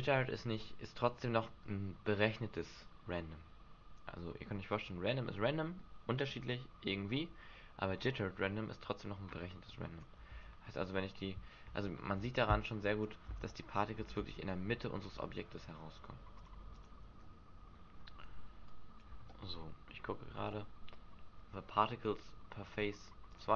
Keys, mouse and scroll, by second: 9.7 click, 10.2 alt+a, 12.0 Escape, 12.6 click, 13.3 alt+a, 14.0 alt+a, 15.1 middle click, 16.3 click, 16.8 click, 17.1 alt+a, 18.1 Escape, 18.7 click, 19.2 alt+a, 19.9 middle click, 20.4 alt+a, 21.3 Escape, 22.6 click, 23.3 click.